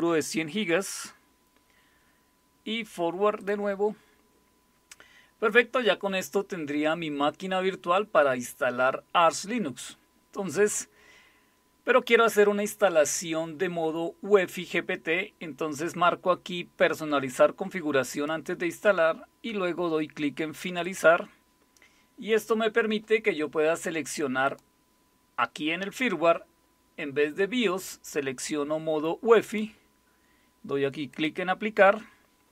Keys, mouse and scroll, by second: 0.0-1.2 typing, 3.4 click, 18.1 click, 20.8 click, 24.4 click, 29.4 click, 31.1 click.